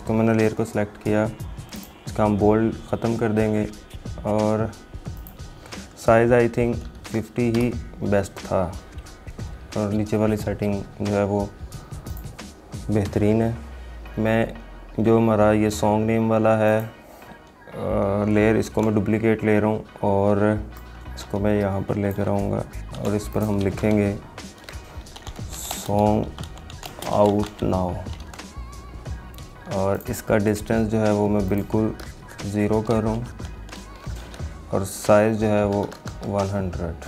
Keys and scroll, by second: 18.8 ctrl+j, 23.8 ctrl+a, 28.4 ctrl+a.